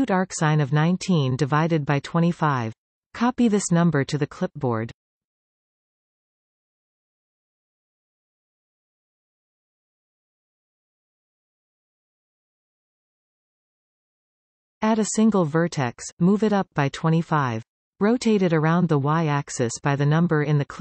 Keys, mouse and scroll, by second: 14.4 shift+a, 17.0 g.